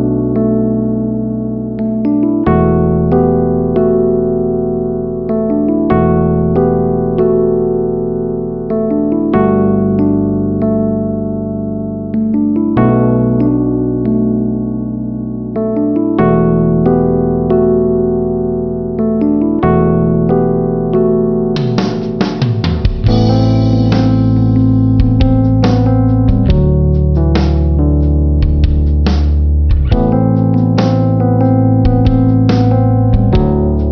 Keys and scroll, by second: 20.9 space.